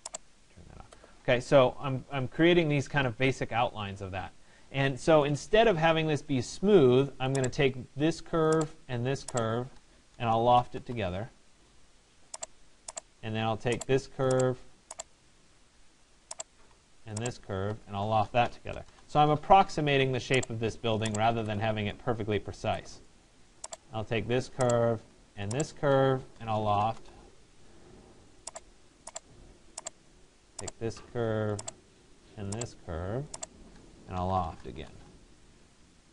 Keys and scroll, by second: 10.4 Return, 18.6 Return, 26.6 Return, 34.4 Return.